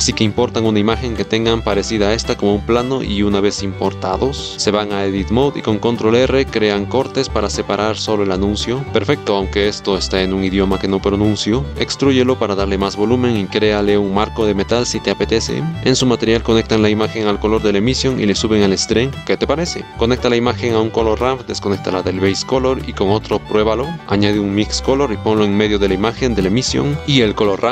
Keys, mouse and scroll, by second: 2.3-3.5 middle drag, 4.8 Tab, 5.7 ctrl+r, 6.1 ctrl+r, 6.6 ctrl+r, 7.1 3, 8.0 x, 8.4 shift+middle click, 8.7 shift+middle click, 8.8 Tab, 9.7-10.2 drag, 10.2 Tab, 10.7 middle click, 11.2 a, 11.7 e, 13.7 shift+s, 14.0 click, 14.1 Tab, 14.7 click, 15.1 click, 15.5 middle click, 15.7-16.9 drag, 20.0 click, 21.6 click, 27.2-27.7 drag.